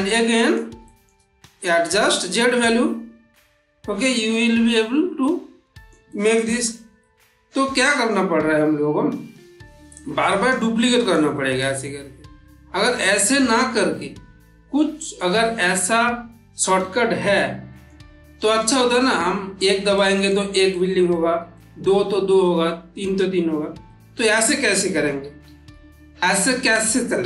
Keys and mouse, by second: 1.7-5.6 drag, 5.6-6.3 middle click, 9.8-10.4 click, 10.7 middle click, 11.7-13.1 middle drag, 13.9-17.9 middle drag, 19.8-20.5 middle drag, 25.1 ctrl+z, 27.1 ctrl+z.